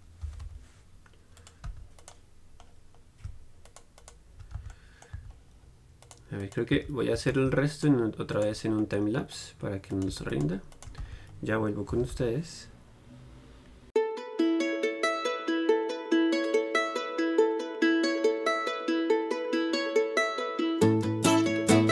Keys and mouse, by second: 0.5 g, 1.9 z, 2.9-4.8 right drag, 4.8 z, 5.4 z, 7.0 z, 7.4 z, 11.2-14.0 right drag, 11.2 z, 12.2 g, 14.0-21.9 typing, 14.1 right click, 15.1 click, 15.6 click, 16.1 click, 16.3 click, 16.5 right click, 16.7 right click, 17.1 click, 17.2 right click, 17.4 click, 17.7 click, 17.9 click, 18.0 right click, 18.1 right click, 18.7 right click, 19.0 click, 19.3 middle click, 19.7 click, 20.4 click, 20.5 right click, 20.9 click, 21.2 right click, 21.7 click.